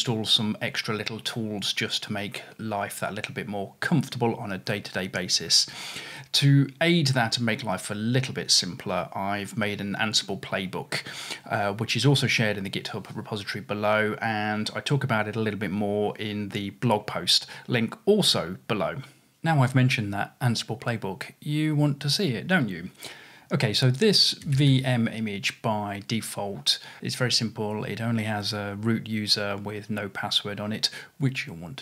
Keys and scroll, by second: 24.8 typing, 27.0 Return, 27.9 typing.